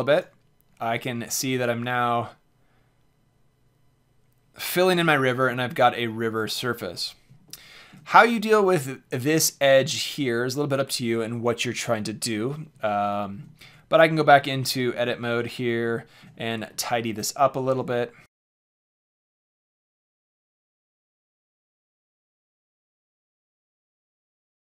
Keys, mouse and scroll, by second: 1.3-1.9 middle drag, 2.3 middle drag, 2.7 middle click, 7.4-7.8 middle drag, 7.8-9.3 drag, 13.0-15.4 drag, 13.6 Tab, 19.0-21.1 drag, 21.7 click, 22.0 KP_7, 22.3 KP_Decimal.